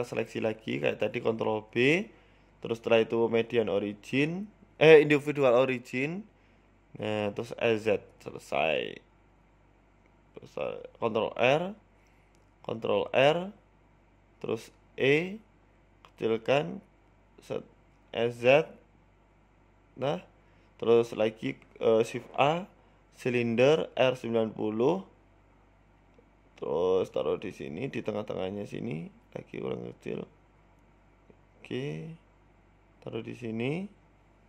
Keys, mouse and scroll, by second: 1.2 ctrl+b, 4.3 click, 4.3 s, 4.9 s, 6.8 Tab, 9.1 right click, 9.4 Tab, 9.7 shift+middle click, 10.9 ctrl+r, 12.7 ctrl+r, 15.0 click, 15.4-15.8 scroll up 2, 15.6 shift+middle click, 16.0 e, 16.2 s, 17.6-17.9 scroll up 4, 17.8 middle click, 18.4 KP_Decimal, 19.1 KP_1, 19.6 s, 21.5-22.4 scroll down 14, 22.3-22.8 scroll up 8, 22.7 shift+middle click, 23.4 shift+a, 25.0 r, 26.0 s, 27.0 scroll down 5, 27.3 s, 27.9 g, 28.8 s, 29.5-30.0 scroll up 3, 29.8 g, 31.5 s, 31.7 s, 33.2 g.